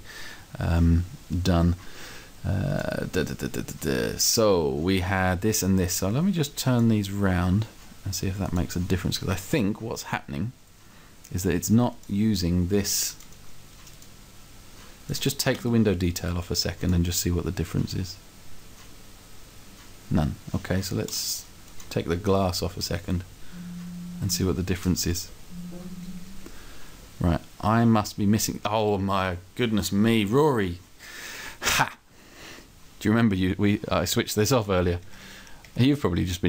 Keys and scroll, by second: 15.9 Delete, 22.3 Delete.